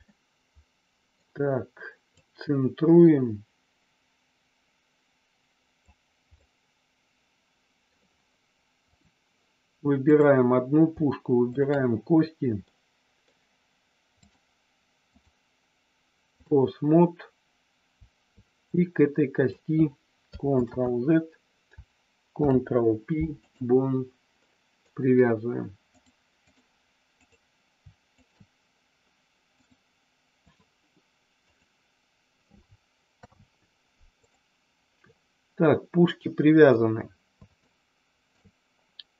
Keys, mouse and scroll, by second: 0.0-1.1 middle drag, 2.3-5.7 drag, 6.4-7.9 middle drag, 8.9 click, 10.1 click, 11.5 shift+click, 12.6 middle click, 15.0-16.5 drag, 18.6 click, 20.5 ctrl+z, 22.4 ctrl+p, 24.4 middle click, 25.9 click, 27.3 click, 28.0 shift+click, 29.5-30.5 drag, 33.1 ctrl+p, 35.0-36.6 middle drag, 37.6 shift+middle click.